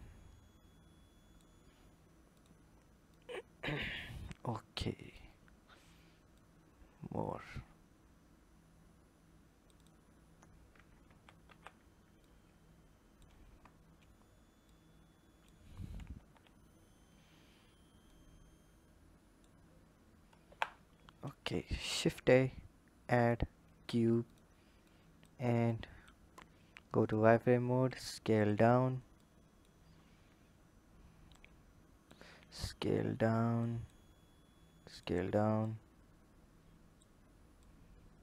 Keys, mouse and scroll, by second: 2.1 click, 2.9 click, 5.3-6.1 scroll up 2, 6.1 click, 9.5 click, 10.9 ctrl+z, 11.3 ctrl+z, 12.0 click, 13.3 Tab, 14.4 click, 15.9 KP_3, 16.8-17.8 scroll up 3, 17.8 click, 20.3 KP_1, 20.8-21.6 scroll down 5, 21.6 shift+a, 23.7 s, 24.6 click, 25.5 click, 26.8 click, 27.2-27.7 scroll up 4, 27.7 s, 29.0-29.8 drag, 29.8 scroll up 4, 31.2 click, 35.4 click, 37.4 click.